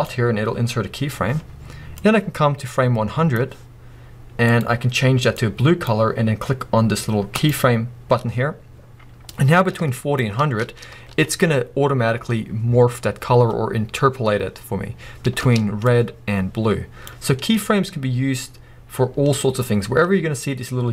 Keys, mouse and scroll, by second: 2.0-4.6 drag, 7.3 click, 9.3-15.4 drag, 10.9 space, 15.4 space, 18.1-20.9 scroll up 1.